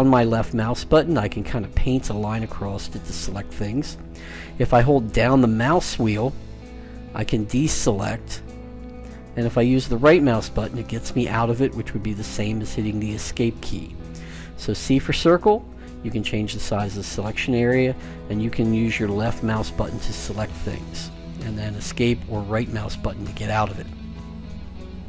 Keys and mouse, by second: 10.7-12.7 right drag, 14.6 c, 22.8-24.6 right drag, 24.0 Escape.